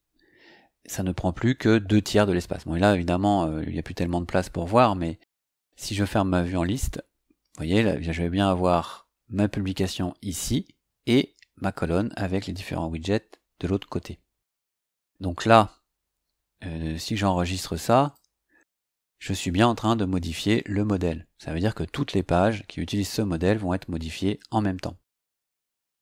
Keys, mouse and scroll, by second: 6.6 click, 18.0 click, 25.4 click.